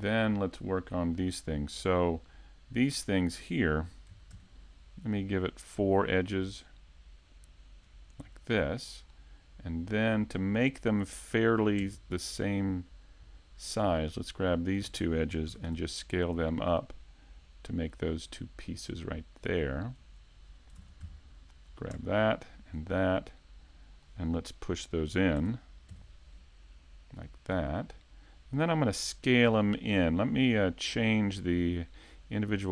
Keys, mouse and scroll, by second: 0.1 middle click, 3.1 middle click, 4.3 ctrl+r, 8.2 click, 8.9 middle click, 9.5-10.4 scroll down 2, 10.0 middle click, 13.6 alt+right click, 14.4 alt+shift+right click, 20.1 click, 20.8 ctrl+Tab, 21.7 right click, 22.4 shift+right click, 22.9 middle click, 25.4 e, 27.9 click, 31.1 click.